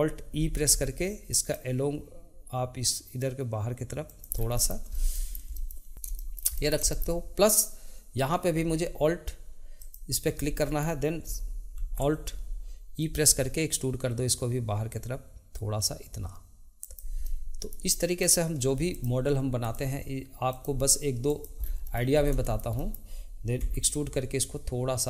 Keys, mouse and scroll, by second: 0.3 alt+e, 4.5 middle click, 4.9 scroll down 2, 5.1-9.7 shift+middle drag, 9.7 alt+click, 10.6-11.7 middle drag, 11.7 alt+e, 17.2 middle click, 18.2 click, 18.9 shift+click, 19.6 shift+click, 20.5 shift+click, 21.3 shift+click, 21.6 scroll down 2, 21.8 middle click, 22.1 scroll up 2, 22.4-23.6 shift+middle drag, 23.6 e.